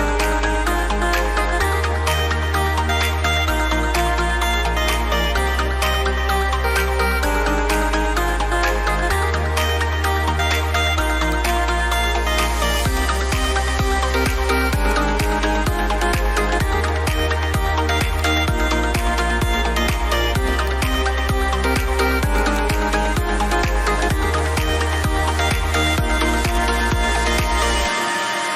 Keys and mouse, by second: 4.2 ctrl+alt+Num_Lock, 5.4 ctrl+alt+shift+e, 11.3 click, 26.2 click.